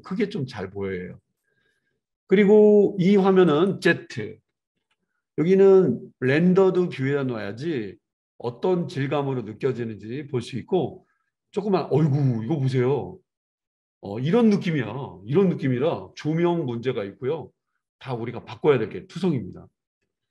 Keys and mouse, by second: 3.5 click, 4.8 z.